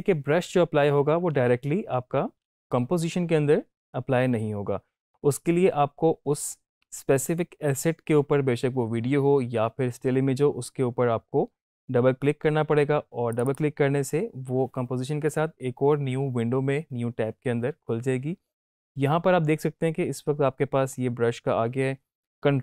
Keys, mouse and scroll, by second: 1.3 ctrl+z, 1.9 ctrl+z, 13.3 click.